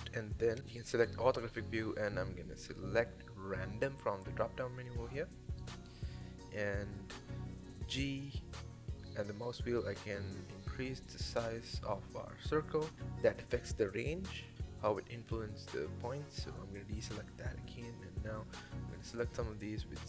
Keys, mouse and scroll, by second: 0.0 click, 5.2-6.4 drag, 6.4-7.7 middle drag, 7.7 g, 13.7-15.8 middle drag, 15.8 click, 16.1-18.1 middle drag, 18.1 c.